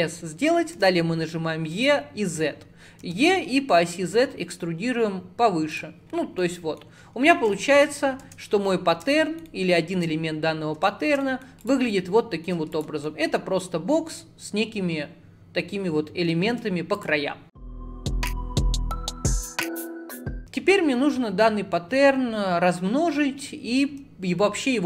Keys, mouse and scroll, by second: 6.1 scroll down 1, 6.5 middle click, 6.9-7.5 scroll down 10, 7.6 shift+middle click, 7.9-8.3 scroll down 1, 8.3 Tab, 8.6-9.2 scroll up 3, 9.2-10.2 shift+middle drag, 10.2-10.5 scroll up 2, 10.5-10.9 scroll down 1, 10.9 shift+middle click, 11.7 click, 12.0 shift+middle click, 12.8 click, 13.1-16.1 middle drag, 16.5 alt+z, 17.0 click.